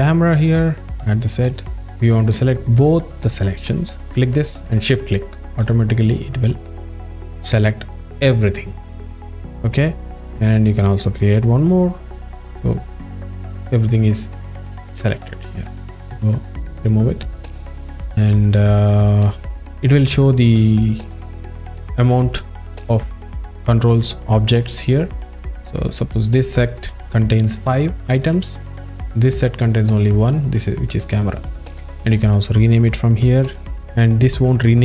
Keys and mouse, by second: 0.6 click, 4.0 click, 11.2 click, 12.3 click, 16.6 drag, 26.3 click, 29.1 click, 32.1-34.8 drag.